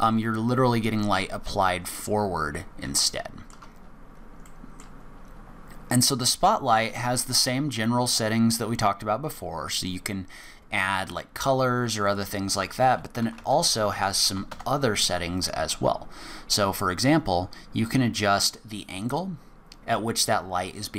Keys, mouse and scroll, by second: 2.0-2.9 scroll down 1, 3.1 shift+middle click, 3.8-4.6 scroll down 10, 4.4 middle click, 5.2-5.7 scroll up 2, 7.7 click, 17.8 click.